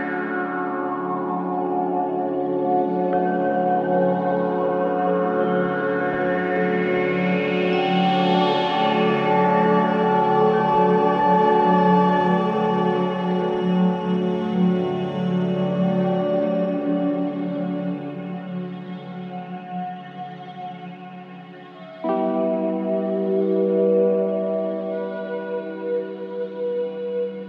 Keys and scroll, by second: 5.5 alt+f, 15.8 ctrl+space.